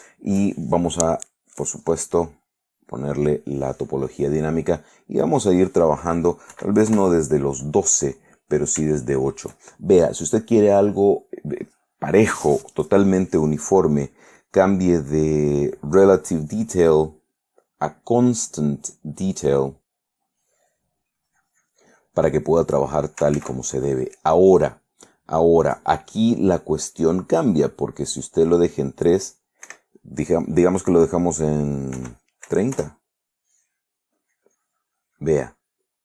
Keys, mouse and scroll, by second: 2.5 click, 5.4 click, 6.7 8, 7.1 Return, 8.3 click, 16.3 click, 19.4 click, 21.3-22.5 drag, 23.5 ctrl+z, 27.6 click, 29.8 Escape, 30.6 click, 32.1 3, 32.6 0, 32.9 Return, 34.3-35.6 drag.